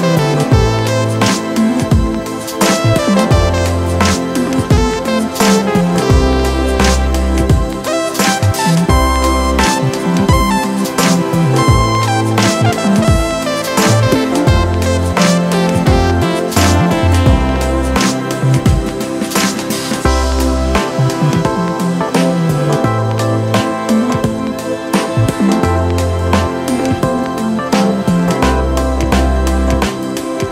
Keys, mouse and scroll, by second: 8.9 alt+click, 17.4 ctrl+d, 24.5 ctrl+t, 25.8 alt+shift+click.